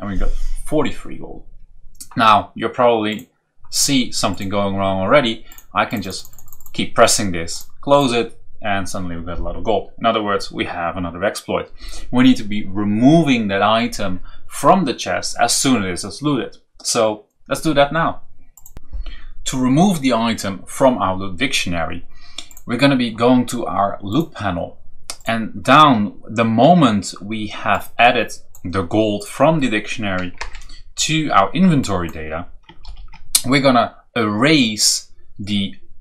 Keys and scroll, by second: 30.3 Return, 32.8 ctrl+v.